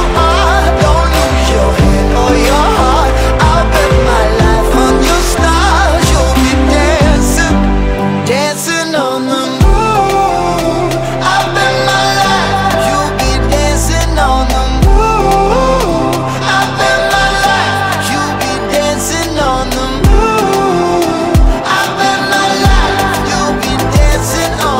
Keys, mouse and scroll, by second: 1.0 click, 1.1 alt+right click, 2.0 alt+click, 2.6 alt+right click, 3.1 click, 4.2 click, 4.7 shift+d, 5.3 click, 8.2 click, 8.7 r, 10.8 click, 10.9 r, 13.6-14.1 scroll down 3, 14.2 click, 14.8 ctrl+s, 15.7 click, 15.9 click, 16.3 click, 16.9 click, 18.9-19.2 drag, 19.3-20.5 drag, 21.1 click, 21.2 ctrl+z, 21.4 ctrl+z, 21.7 click, 23.7 click, 24.4 click.